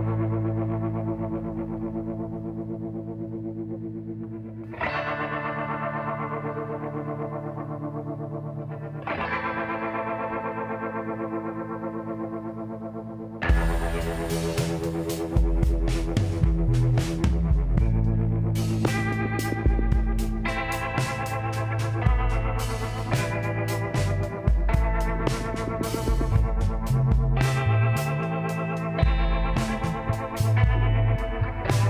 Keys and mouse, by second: 1.4 w, 4.0 middle click, 5.0-8.4 drag, 8.9-10.7 drag, 11.7 w, 12.9-14.9 drag, 19.3 Tab, 20.4 ctrl+a, 22.2 Tab, 23.6 w, 28.8-30.6 drag, 30.6 KP_Decimal, 31.2-31.8 middle drag.